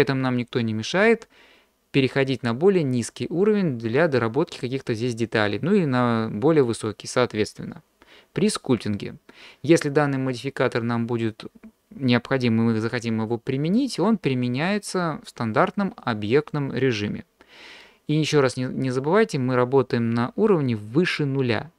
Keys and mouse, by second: 2.3 click, 6.7 click.